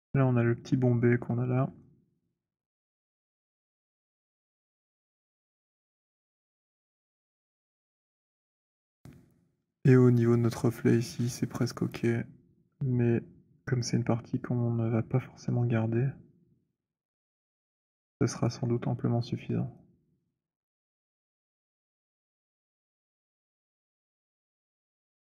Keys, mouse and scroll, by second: 0.1 alt+click, 4.7 click, 5.7 alt+middle click, 6.6 click, 11.0 middle click, 16.7-17.2 scroll, 18.3 alt+click, 22.4 click, 22.4 z, 24.0 alt+click, 24.8 alt+middle click, 24.8 alt+right click.